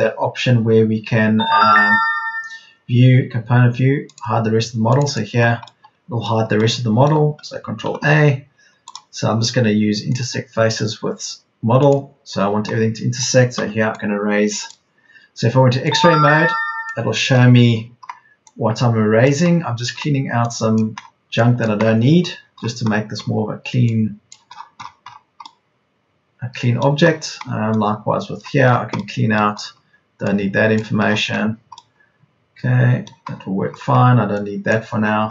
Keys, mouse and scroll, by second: 4.9 Escape, 7.8 ctrl+a, 13.5 e, 14.9 e, 19.9 e.